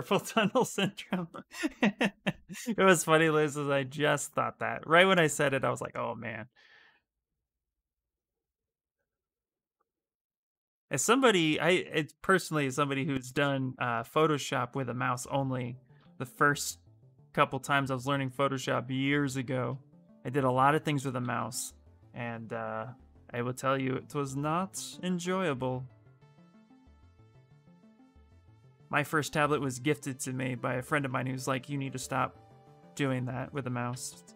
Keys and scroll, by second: 21.0 ctrl+z, 22.1-22.9 typing, 33.6 ctrl+z, 33.8 ctrl+z.